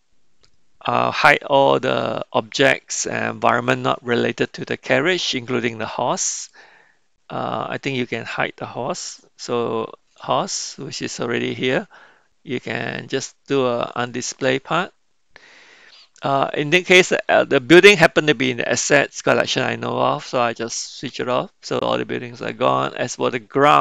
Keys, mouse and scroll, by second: 14.0 click, 21.2 click, 22.7 click.